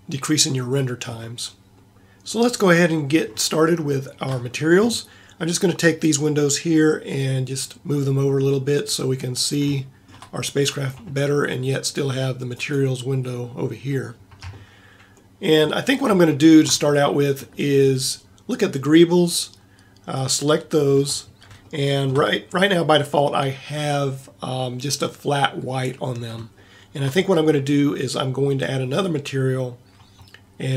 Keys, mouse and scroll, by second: 8.3 middle click, 9.8-11.4 middle drag, 12.6-14.3 drag, 15.1 middle click, 16.5 scroll up 1, 16.5 middle click, 17.3 scroll up 1, 20.3 middle click, 21.8 middle click, 22.5 middle click, 26.7 middle click, 27.1-30.7 middle drag.